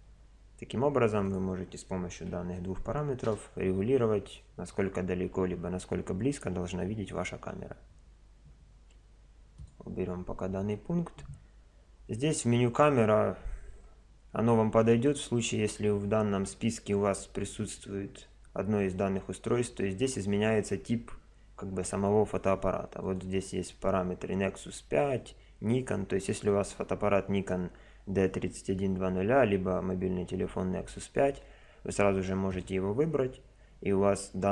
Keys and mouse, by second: 0.0 Escape, 1.3 click, 2.4 KP_0, 9.6 click, 16.3 click, 23.0 click.